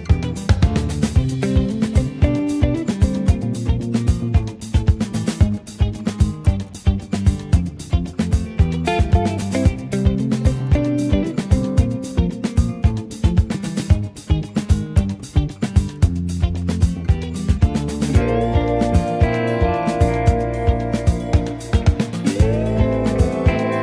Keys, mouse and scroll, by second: 0.0 click, 0.6 space, 1.1 space, 1.7-3.7 drag, 3.7 space, 11.8 space, 12.9-15.0 space, 15.3-17.4 drag, 18.1 Tab, 18.5 click, 19.1-21.9 drag, 22.5 click.